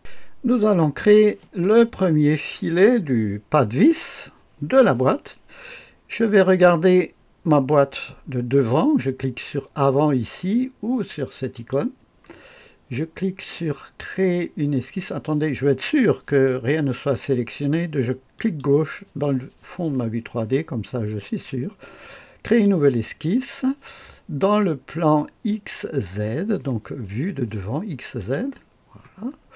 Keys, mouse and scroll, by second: 11.5 click, 18.3 click, 22.4 click, 28.1 click, 29.3-29.5 scroll up 1.